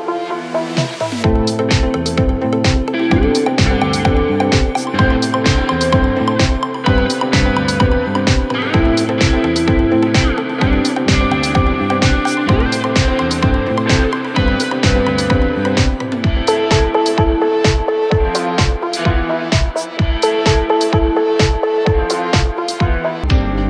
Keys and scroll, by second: 14.7 F3, 19.0 F9.